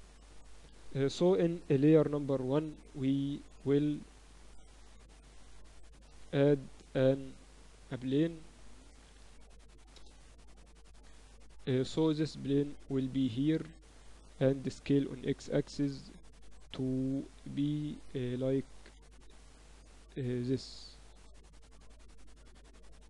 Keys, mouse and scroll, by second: 0.7-1.8 middle drag, 1.8 KP_1, 2.0 z, 3.7 z, 4.2 z, 6.2 shift+a, 9.0 r, 10.7-14.4 drag, 14.2 middle click, 14.9 s, 19.0 s, 20.4-22.1 drag, 21.0 Tab, 21.7-23.0 typing.